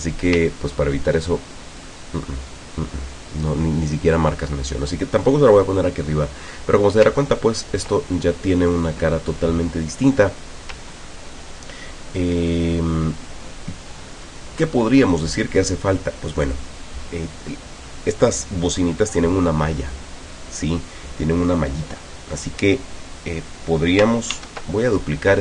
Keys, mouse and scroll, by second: 0.5-0.9 ctrl+scroll down 2, 1.3 ctrl+click, 6.5 scroll down 2, 7.6 ctrl+scroll down 2, 12.1 ctrl+scroll down 2, 12.6-14.5 ctrl+drag, 15.2 click, 24.3 ctrl+d.